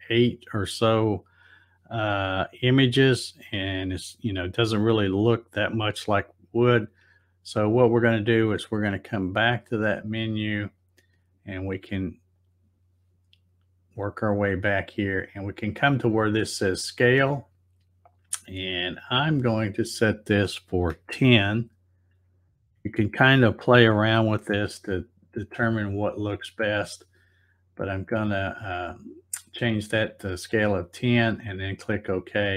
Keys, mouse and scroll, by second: 9.2 click, 9.4 click, 9.7 click, 10.8 click, 12.4 click, 14.0 click, 19.2 click, 22.2 Tab, 31.7 click.